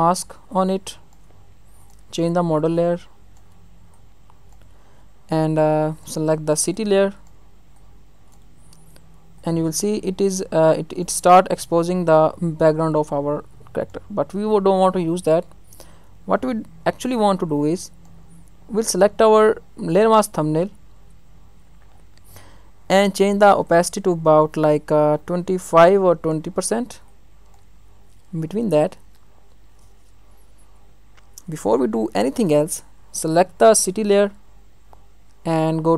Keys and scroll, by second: 4.8 ctrl+alt+z, 15.2 ctrl+alt+z.